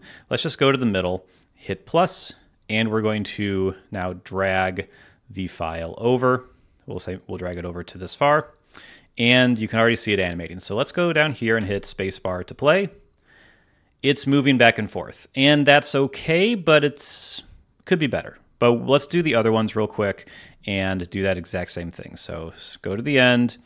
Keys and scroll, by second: 11.5 space, 12.3 space, 19.0 space.